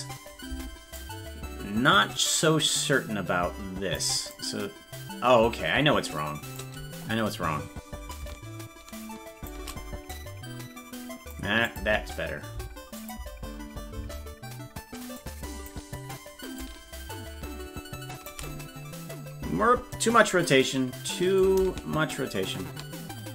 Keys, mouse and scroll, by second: 1.0-3.9 drag, 1.0 space, 4.3-6.5 drag, 8.1-9.5 drag, 10.1-11.3 drag, 11.6 click, 13.0 click, 15.1 click, 16.5-18.4 drag, 21.3-23.3 drag.